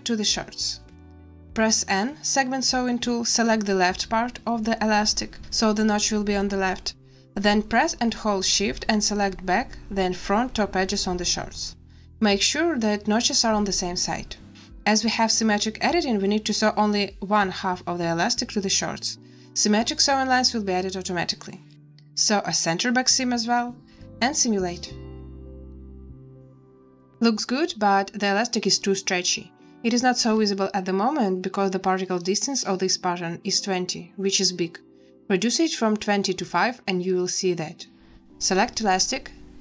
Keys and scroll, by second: 1.8 n, 23.8 space.